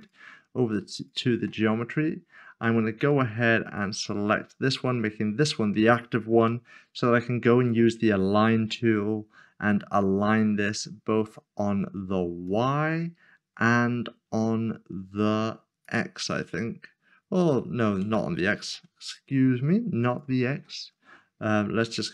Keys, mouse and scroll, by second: 0.0 click, 3.1 click, 4.3 shift+click, 6.5 n, 12.4 click, 15.8 click, 18.6 ctrl+z, 20.5 ctrl+z.